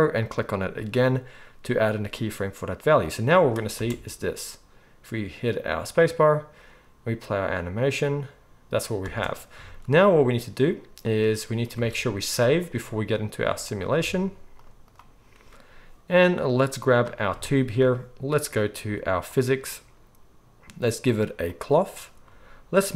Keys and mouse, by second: 0.3-2.8 middle drag, 2.8-16.9 drag, 3.7 space, 9.0 space, 11.8 ctrl+s, 16.9-21.6 middle drag, 21.6-22.9 drag.